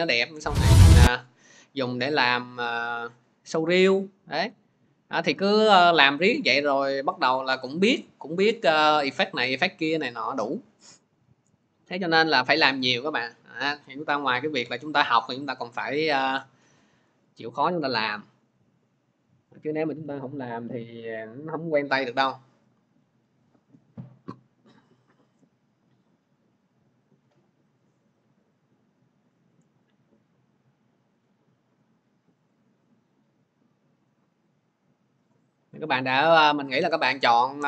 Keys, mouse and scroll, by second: 1.0 scroll up 4, 6.2 scroll, 9.2 click, 11.6 click, 13.7 alt+Tab, 14.4 alt+Tab.